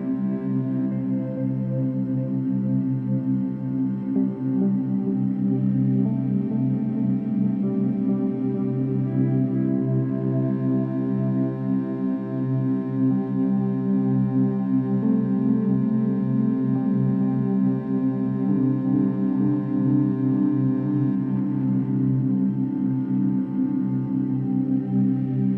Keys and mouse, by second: 0.1 shift+Up, 5.2-7.4 shift+Down, 7.4-8.5 drag, 8.5 shift+Down, 9.0 shift+Down, 9.9 shift+Right, 10.4-12.6 shift+Right, 12.6 shift+Left, 13.7 shift+Down, 14.1 shift+Down, 15.0 Up, 15.2 Up, 15.3 Up, 15.5 Up, 18.1 drag, 19.3 click, 19.9 click, 22.7 click, 23.5-24.5 drag, 24.5 Right, 24.8 Right.